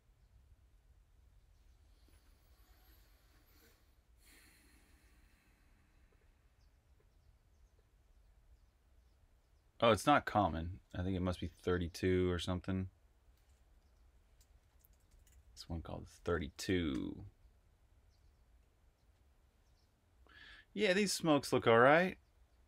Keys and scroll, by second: 13.8 Up, 14.2-17.3 typing, 16.4 Right.